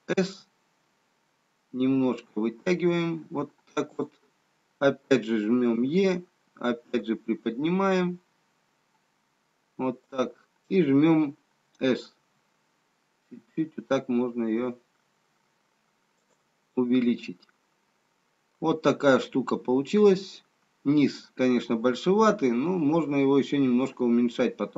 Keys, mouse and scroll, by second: 1.5 s, 5.8 e, 12.1 s, 16.8 middle click, 19.5 middle click.